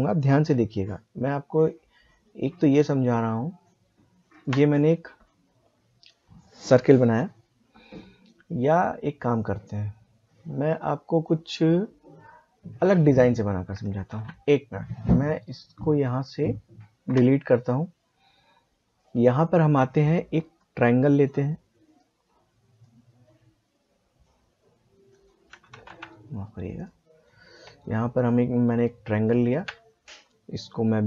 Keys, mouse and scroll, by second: 14.8 ctrl+z, 15.0 click, 18.9-25.8 drag, 25.8 ctrl+z, 26.8-31.0 drag.